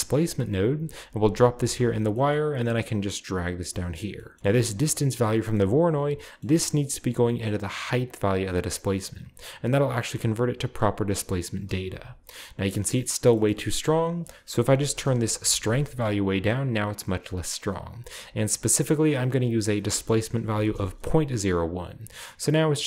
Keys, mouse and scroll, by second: 1.6 click, 1.9-2.8 scroll down 1, 2.1-3.2 middle drag, 2.8-4.3 drag, 4.3-4.9 scroll up 1, 5.5 middle click, 5.6-6.2 scroll up 1, 6.2-6.9 scroll up 1, 6.9-10.8 drag, 10.8-11.8 middle drag, 10.9-11.8 scroll up 1, 11.9 KP_0, 13.3-13.9 middle drag, 13.9 click, 14.7 typing, 14.9 Return, 18.0 click, 19.1 click, 20.5 0, 20.6 Return, 21.6 scroll up 1, 21.8 a.